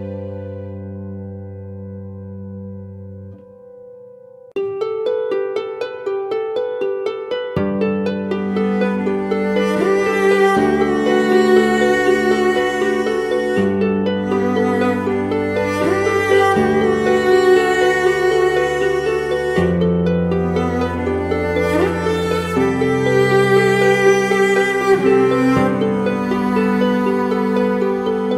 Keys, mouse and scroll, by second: 8.8-10.2 typing, 10.9 double click, 11.8-12.2 typing.